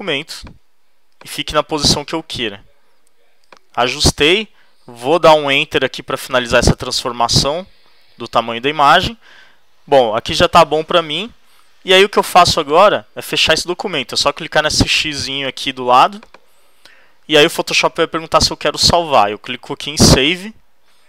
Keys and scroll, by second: 5.7 Return.